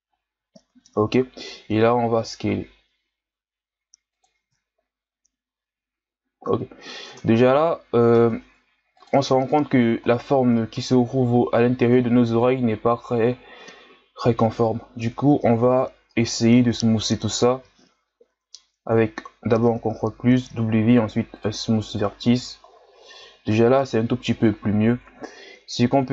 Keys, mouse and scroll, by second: 0.0-0.7 scroll up 5, 0.7 Tab, 1.4 s, 4.4 Tab, 4.7-5.5 scroll down 4, 5.5-6.4 scroll down 3, 6.4-7.1 scroll up 7, 7.1 Tab, 8.1 ctrl+Tab, 10.0-10.4 scroll down 3, 10.4 Tab, 12.0-13.3 ctrl+scroll down 5, 13.3-13.9 scroll down 2, 13.9-15.0 ctrl+scroll up 7, 15.0 Tab, 18.8 ctrl+KP_Add, 20.4 w, 22.2 Tab, 22.7-24.4 scroll down 6, 24.4-24.8 scroll up 7, 25.0 Tab.